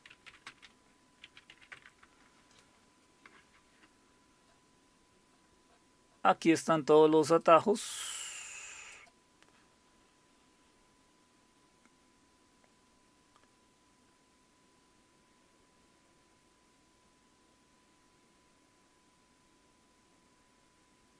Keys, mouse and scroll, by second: 0.0-1.5 typing, 1.7 Tab, 2.0 Return, 4.0-4.6 scroll up 1, 4.6 typing, 7.5-9.0 drag, 9.7-13.1 scroll down 1, 10.5-11.4 typing, 13.1-14.1 scroll down 1, 14.1-15.5 scroll down 1, 15.5-16.8 scroll down 1, 16.8-17.3 scroll down 1, 17.3-18.5 scroll down 1, 18.8-20.5 scroll down 1, 21.0-21.1 scroll down 1.